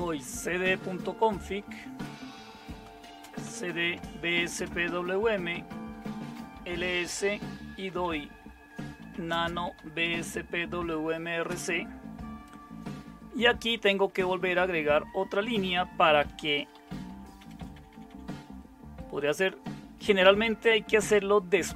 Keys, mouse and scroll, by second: 0.0-1.1 typing, 1.2 Tab, 2.0 Return, 2.6-4.6 typing, 6.1-10.5 typing, 13.4-14.9 typing, 17.1-18.6 typing, 21.0 Up, 21.7 Down.